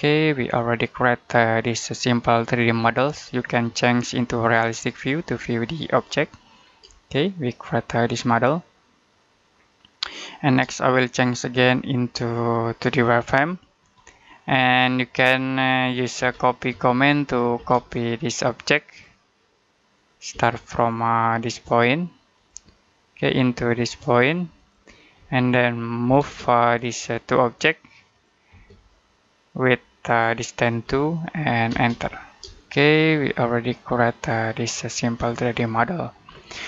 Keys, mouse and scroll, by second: 4.4 click, 6.5 scroll down 1, 7.0 shift+middle click, 11.6 click, 13.9 middle click, 14.3-15.2 scroll up 1, 15.2 middle click, 16.0-17.4 typing, 17.8-18.7 scroll up 1, 18.7 click, 20.2 space, 22.2 click, 25.1 space, 25.3 middle click, 25.9 m, 26.1 space, 26.8 click, 28.4 space, 28.6 click, 30.7 2, 31.6 space, 32.0-32.3 scroll down 1, 32.4 middle click, 36.2-36.6 scroll down 1.